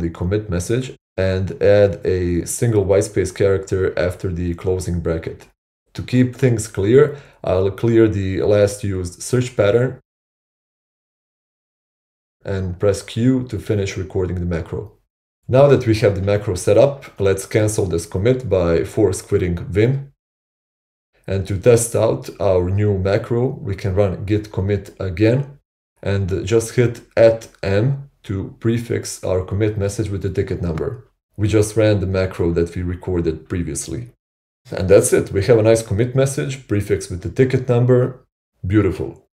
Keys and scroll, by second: 2.8 k, 3.4 shift+a, 4.2 ctrl+[, 7.7-8.9 typing, 11.1 Return, 13.1 q, 16.5-17.5 typing, 19.5 typing, 20.0 Return, 23.8 Up, 25.3 Return, 26.9-33.0 typing, 38.4-39.3 typing.